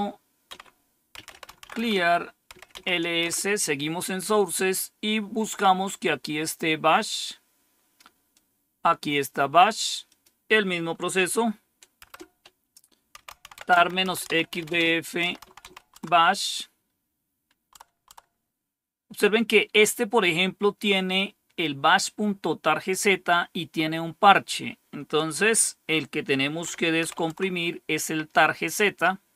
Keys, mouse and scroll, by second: 0.4-2.9 typing, 3.1 Return, 8.3-9.8 drag, 9.5-16.1 typing, 10.0 click, 10.6 click, 17.4-18.1 typing, 26.7-27.4 typing.